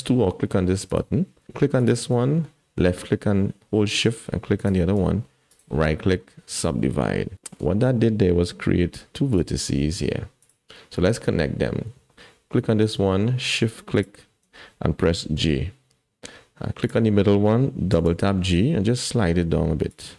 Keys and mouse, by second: 0.9-2.1 drag, 4.6 shift+click, 5.6-6.6 right drag, 7.4 shift+middle click, 8.9 1, 9.3 click, 13.9 shift+click, 15.4 j, 16.8 click, 17.9 g.